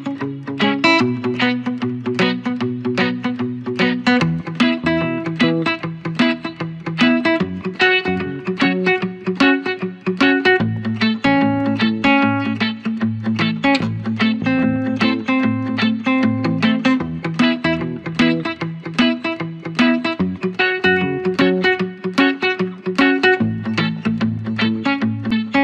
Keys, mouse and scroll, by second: 0.9 ctrl+-, 1.4 ctrl+=, 1.6-2.0 ctrl+scroll down 2, 6.3-7.8 drag, 7.8 scroll down 1, 9.0-9.6 scroll down 2, 9.6-10.3 typing, 10.1 click, 10.6-11.7 drag, 11.7 ctrl+z, 11.9 click, 12.7 click, 12.8 ctrl+=, 13.1-14.9 typing, 14.0 click, 15.0 click, 15.7 ctrl+=, 16.3-16.9 typing, 16.5 click, 17.1-18.2 alt+drag, 18.4 click, 18.9 scroll up 1, 19.3 ctrl+-, 19.7 space, 20.1 click, 20.7 ctrl+z, 20.8 space, 21.3 ctrl+=, 21.8 click, 22.3 scroll down 1, 22.8 ctrl+=, 22.9 scroll down 1, 23.1 space, 23.2-24.3 drag, 24.4 typing, 24.8 alt+click.